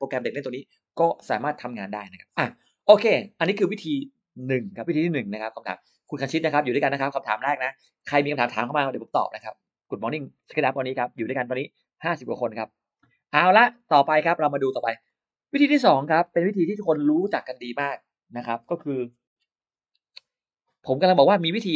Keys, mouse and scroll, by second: 13.3 click, 14.1 click, 14.4 middle click, 14.9 click, 15.7 middle click, 16.6 Delete.